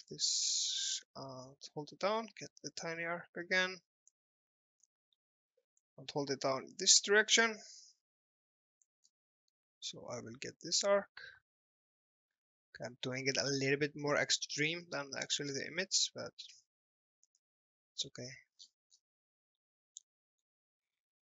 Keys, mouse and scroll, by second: 0.1 click, 4.3 scroll up 1, 4.6 alt+middle click, 5.8 click, 9.0 scroll up 1, 9.4 alt+middle click, 10.9 click, 14.4 scroll up 1, 14.8 alt+middle click, 15.2-15.5 scroll down 1, 16.5 click, 17.6 alt+middle click, 18.7-19.0 scroll up 1, 19.3 middle click, 20.1 middle click.